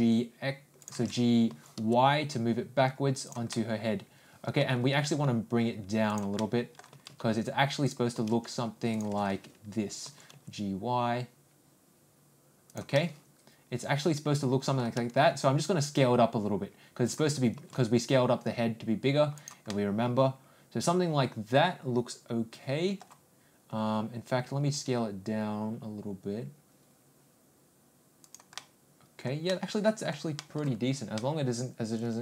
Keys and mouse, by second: 1.5 ctrl+g, 3.5-4.6 middle drag, 4.9 ctrl+g, 6.4 middle click, 6.9 g, 8.2 g, 13.0-14.8 middle drag, 15.0 s, 17.5 g, 19.7-23.0 middle drag, 24.7 s, 28.6-29.3 middle drag, 29.5-30.1 middle drag, 30.4 middle click, 31.2-32.2 middle drag.